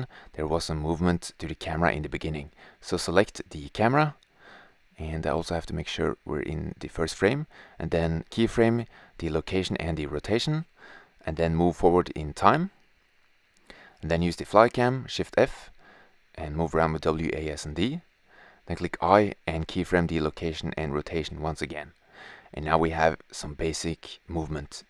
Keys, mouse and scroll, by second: 0.0 drag, 0.9 KP_0, 1.7-2.8 drag, 5.3-6.5 drag, 10.3-11.7 drag, 14.0 shift+f, 19.7-21.0 drag.